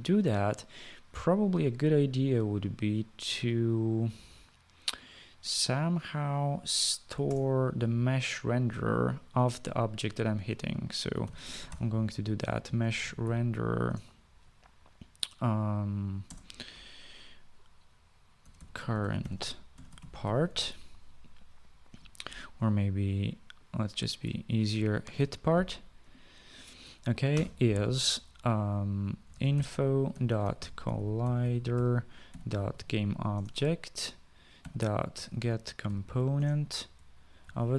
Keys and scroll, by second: 7.6 Return, 11.3-14.1 typing, 14.2 Return, 16.6 space, 18.5-21.3 typing, 25.1-26.0 typing, 27.4-28.1 typing, 29.4-33.6 typing, 33.7 Return, 34.7-37.7 typing.